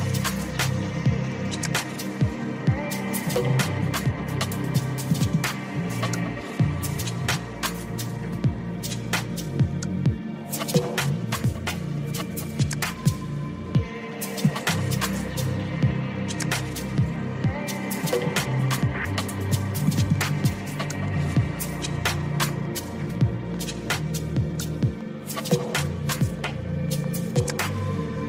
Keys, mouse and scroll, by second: 0.6 click, 6.8 click, 7.5 click, 8.2 click, 9.0 click, 11.6 click, 12.4 click, 15.7 click, 17.5 click, 19.0 click, 22.5 click.